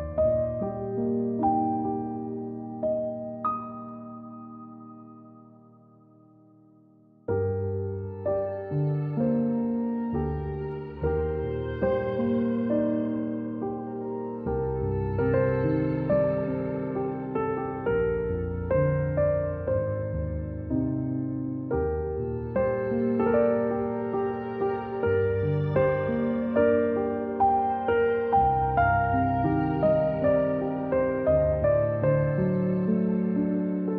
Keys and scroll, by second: 2.0 a, 4.6 ctrl+z, 12.6 ctrl+z, 13.7 c, 17.5-18.1 typing, 19.3 =, 21.6 z, 22.5 space, 23.1 a, 25.0 z, 26.2 space, 27.1 z, 28.1 ctrl+1, 28.9-30.3 typing, 31.6-33.0 typing.